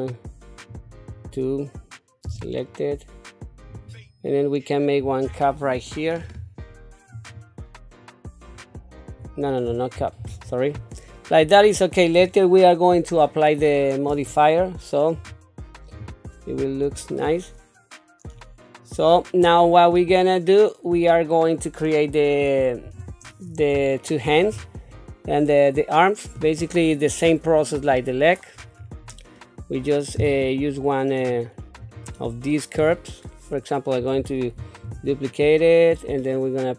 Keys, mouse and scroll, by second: 2.2 s, 6.2 ctrl+r, 10.0 ctrl+z, 15.1 q, 15.9 Tab, 16.9-21.4 middle drag, 22.8 KP_7, 23.8 shift+middle click, 31.8 click, 34.6 shift+d.